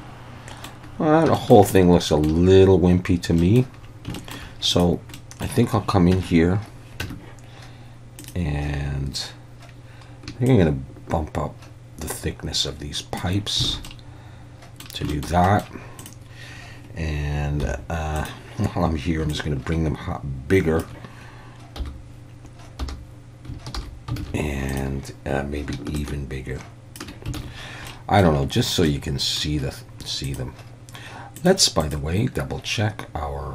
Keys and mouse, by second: 1.4 shift+middle click, 1.7-2.3 middle drag, 3.4 middle click, 4.2 shift+middle click, 4.8-5.2 drag, 5.2 middle click, 6.2 Tab, 7.0 Tab, 8.2 click, 10.5-13.2 shift+drag, 13.8 alt+a, 13.9-14.9 middle drag, 15.1 shift+middle drag, 15.5 middle click, 17.6 h, 19.5-20.8 shift+drag, 21.8 /, 22.8 /, 23.8 alt+h, 24.2 alt+a, 24.8 click, 26.0-27.0 shift+drag, 27.4 alt+a, 27.9-28.2 middle drag, 28.9-29.4 middle drag, 30.3 click, 31.4 drag, 31.9-33.5 drag.